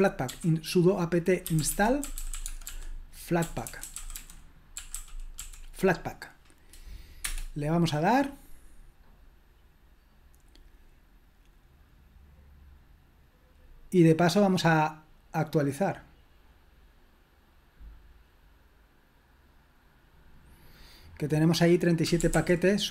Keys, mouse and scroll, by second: 0.0-5.9 typing, 7.2 Return, 21.8-22.9 typing.